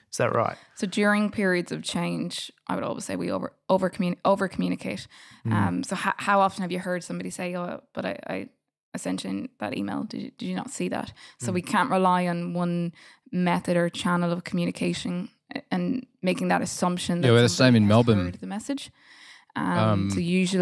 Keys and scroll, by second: 5.4 BackSpace, 7.3 f.